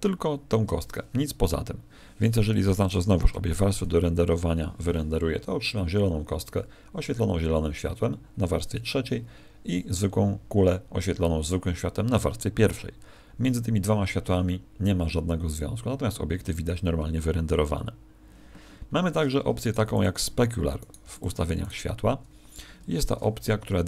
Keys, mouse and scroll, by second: 2.8 shift+click, 16.7 Escape, 19.5 right click, 19.8 x, 20.7 right click, 20.9 x, 21.5 right click.